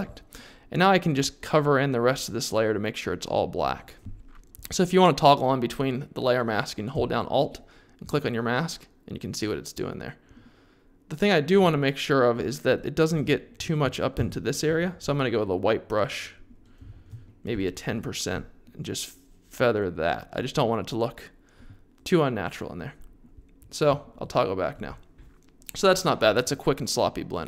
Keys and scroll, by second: 14.1 x, 14.6 3, 16.9 alt+super+z, 17.5 1.